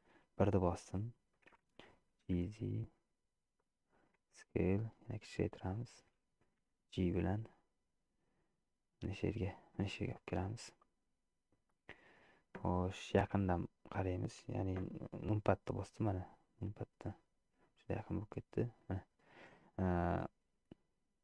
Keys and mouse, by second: 2.2 g, 4.4 s, 6.7 g, 13.3 KP_Decimal, 17.8-19.8 drag, 20.3-21.2 middle drag.